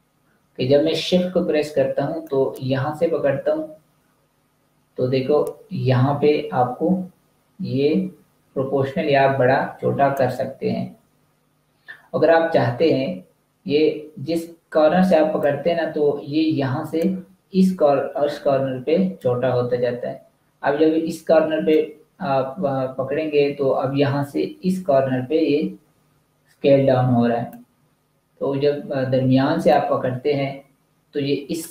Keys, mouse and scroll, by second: 15.3 shift+click, 21.7 shift+click, 29.6 shift+click.